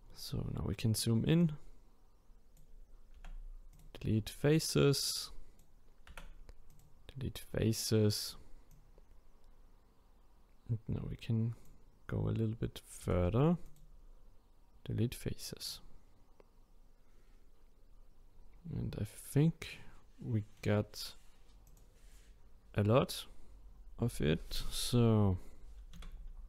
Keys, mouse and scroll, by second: 1.4-2.7 drag, 3.1 Delete, 5.0 click, 6.1 Delete, 8.7 click, 13.0 Delete, 15.7-18.7 middle drag, 21.6 click, 26.1 a.